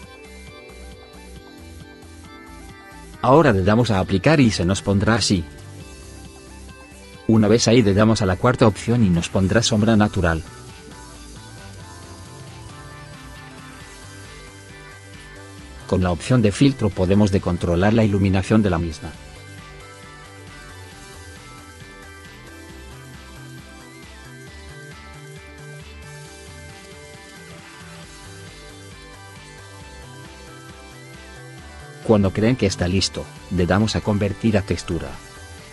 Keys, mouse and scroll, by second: 5.1 right click, 8.2 right click, 14.3 right click, 29.9 right click.